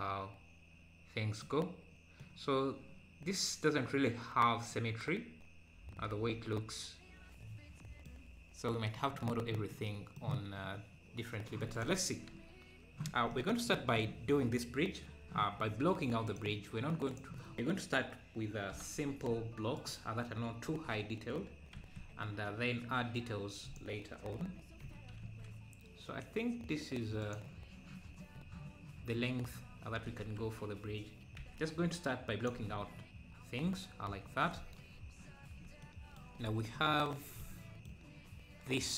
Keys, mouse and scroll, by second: 5.2-11.2 middle drag, 11.2-11.7 scroll up 1, 11.7-13.3 drag, 13.7-16.3 middle drag, 16.3-18.8 drag, 18.8 g, 20.7 KP_7, 21.7 KP_7, 21.8 s, 29.6 `, 30.4 Tab, 33.0-33.4 scroll down 5, 34.3 scroll down 2, 35.8-36.2 scroll down 3, 36.4-36.8 scroll up 2, 36.8-38.9 middle drag.